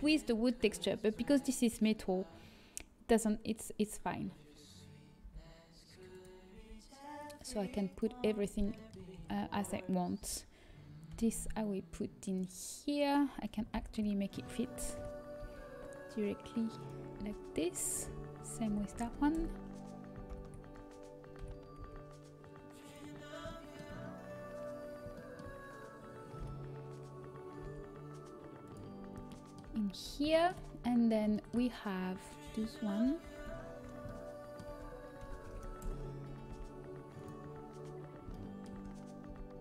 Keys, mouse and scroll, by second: 6.5 g, 9.1 a, 11.0 l, 13.7 ctrl+p, 15.3 g, 17.2 a, 19.3 l, 19.3 r, 20.3 ctrl+p, 22.8 g, 25.3-26.3 drag, 26.3 g, 30.0 a, 33.1 l, 35.8 r, 37.4 g, 39.2 g.